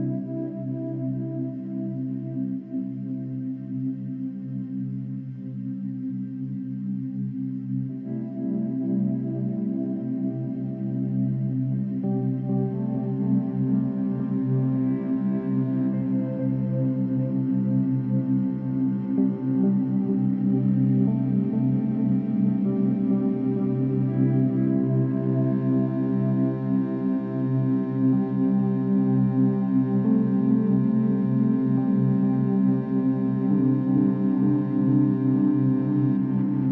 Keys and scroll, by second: 7.4 ctrl+z, 8.8 Delete, 11.7 Delete, 19.8 space, 20.2 space, 24.6 ctrl+z.